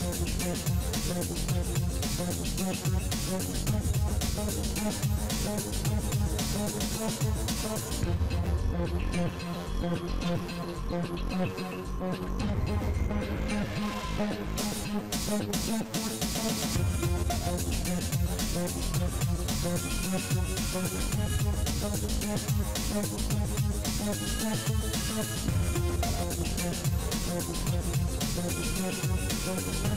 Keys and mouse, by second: 0.8 KP_3, 2.7-4.1 middle drag, 4.2 KP_7, 4.6 z, 5.8 z, 6.9 KP_3, 10.5 right click, 11.2-13.1 middle drag, 13.1-14.3 drag, 13.2 e, 14.2 a, 14.7-16.6 drag, 15.8 g, 17.0 a, 17.3 b, 18.6 KP_1, 22.8-27.2 right drag, 23.7 f, 24.0 a, 25.2 g, 27.0 e.